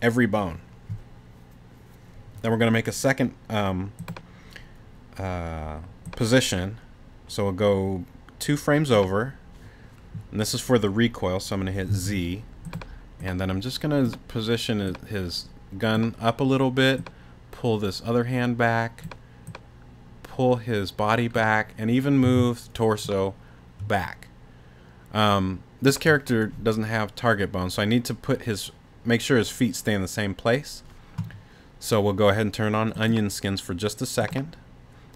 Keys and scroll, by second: 11.9 z, 22.2 t.